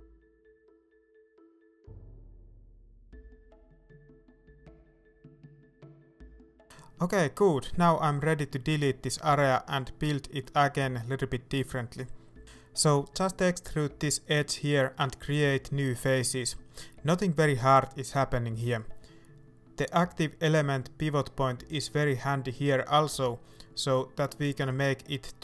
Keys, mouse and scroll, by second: 1.5 shift+middle click, 1.6 scroll up 1, 1.8 s, 4.0 shift+right click, 4.6 s, 5.6-7.8 middle drag, 7.8 click, 8.8 right click, 9.3 middle click, 10.2 x, 11.9-13.2 middle drag, 14.9 right click, 15.4 middle click, 16.4 e, 18.9 middle click, 22.2 shift+right click, 22.7 middle click, 23.4 s, 23.9 click, 24.0 middle click, 24.3 f, 24.8 right click.